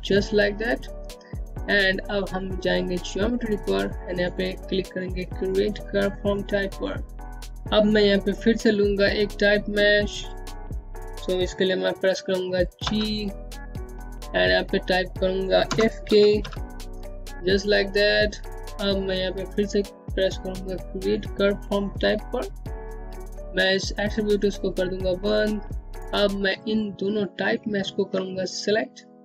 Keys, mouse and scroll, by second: 3.0 click, 4.8 click, 10.7 click, 13.7-14.9 typing, 16.3-17.0 typing, 20.3 click, 24.6 click, 25.5 scroll down 1, 27.6 click, 28.3 ctrl+click.